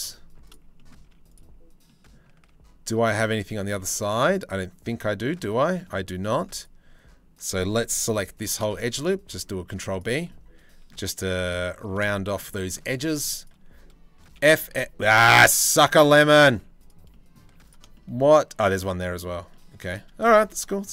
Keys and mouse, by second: 0.4 click, 0.7 z, 1.5 click, 2.1 a, 3.0 click, 3.3 z, 3.8 click, 8.0 ctrl+b, 10.8 2, 11.1 click, 11.7 shift+middle click, 12.2 shift+middle click, 13.0 click, 14.0 f, 14.3 f, 14.8 ctrl+z, 15.0 ctrl+z, 16.2 z, 17.0 z.